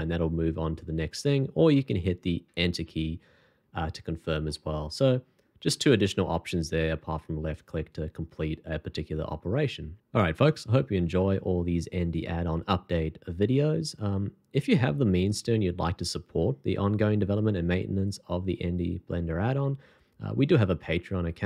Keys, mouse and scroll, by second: 2.5 Return, 4.4 middle click, 5.7 scroll down 1.